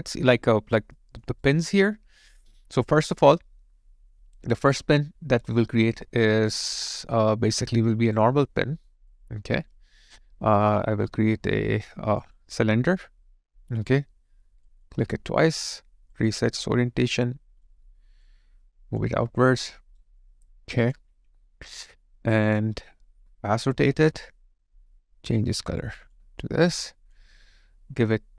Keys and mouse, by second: 0.3 alt+click, 1.0 alt+middle click, 1.4 alt+right click, 7.5 alt+right click, 8.5 alt+middle click, 9.1 alt+click, 19.2 alt+right click, 20.2 alt+click, 22.5 alt+click, 23.2 ctrl+click, 26.2 ctrl+click, 26.4 alt+right click, 26.8 alt+click.